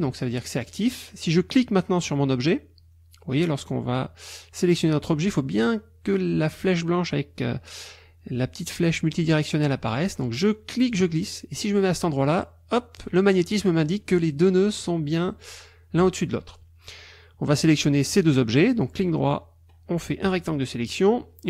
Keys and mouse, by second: 10.9-13.2 drag, 18.2-20.4 drag.